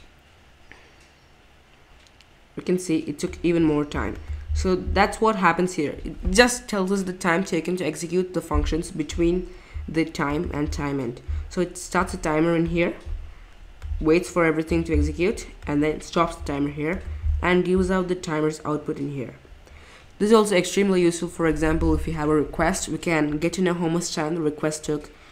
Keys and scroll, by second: 5.1 typing, 17.8 typing.